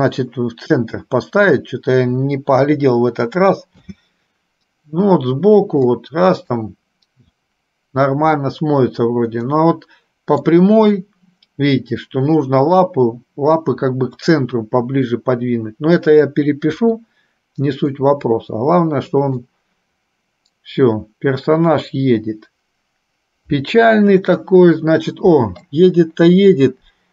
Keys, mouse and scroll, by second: 2.8 KP_3, 3.9 space, 6.1 middle click, 9.6-10.6 middle drag, 16.9 KP_3, 18.1-19.5 middle drag.